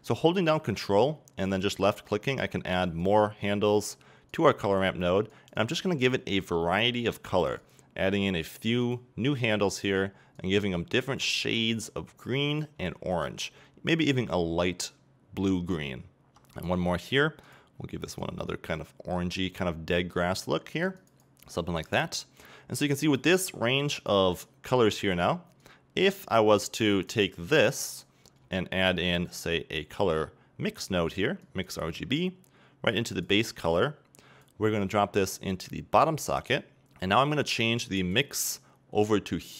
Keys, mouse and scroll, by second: 17.4 click, 25.6-29.0 drag, 33.6 click, 35.3-36.6 drag.